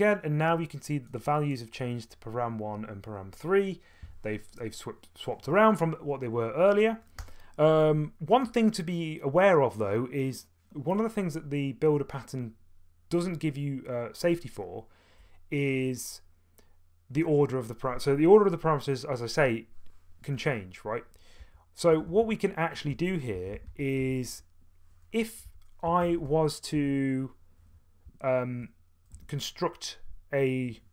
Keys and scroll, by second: 7.2 Return, 21.2-24.0 typing, 25.2-26.7 typing, 26.2 Return, 28.0-29.1 typing.